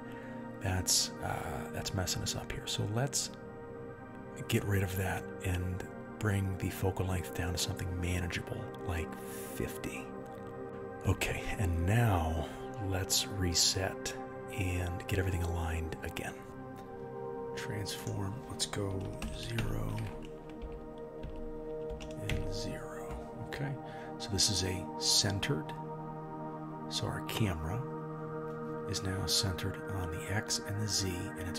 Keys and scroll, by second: 0.7 KP_0, 7.3 Left, 7.4 Left, 13.3 g.